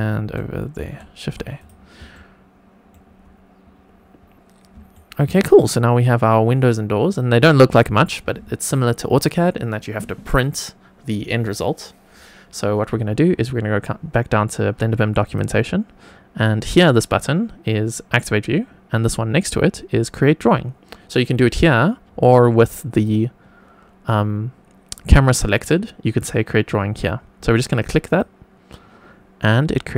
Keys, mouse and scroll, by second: 0.8 shift+a, 1.5 click, 2.0-2.9 shift+middle drag, 4.9 shift+middle click, 15.2 click, 22.9 click, 28.0 click.